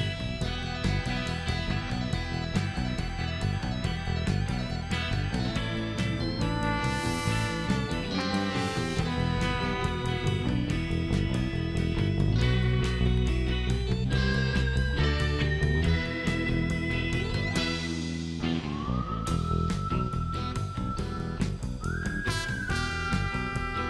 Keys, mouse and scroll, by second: 1.2 click, 2.5 2, 4.0 click, 5.6 click, 6.6 click, 7.9 click, 9.4 click, 10.8-11.3 scroll up 2, 12.1 scroll up 1, 12.7 scroll down 1, 14.0 scroll down 1, 15.1 click, 17.4 click, 20.1 click, 21.1 click, 22.6 scroll up 1.